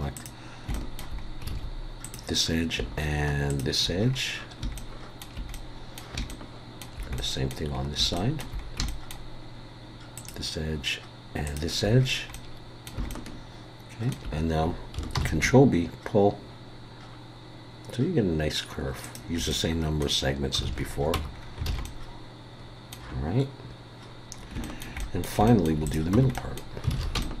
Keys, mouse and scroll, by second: 0.1 click, 0.7 shift+middle click, 1.2 scroll up 2, 1.5 alt+a, 2.0 click, 3.5 shift+click, 4.0 scroll down 5, 4.7 shift+middle click, 5.5 middle click, 6.3 shift+middle click, 7.2 middle click, 7.7 scroll up 2, 8.2 shift+middle click, 8.6 scroll up 1, 8.9 shift+middle click, 10.2 shift+click, 11.5 shift+click, 12.0-12.3 scroll down 3, 12.3 middle click, 12.9 scroll up 1, 13.1 shift+middle click, 15.2 ctrl+b, 19.5 middle click, 20.7 alt+a, 21.1 Tab, 21.4 scroll down 3, 21.7 alt+a, 21.8 middle click, 24.4 scroll up 2, 24.6 shift+middle click, 25.0 middle click, 25.5 shift+middle click, 25.9 click, 26.1 Tab, 26.3 middle click, 26.9 alt+a, 27.2 shift+middle click.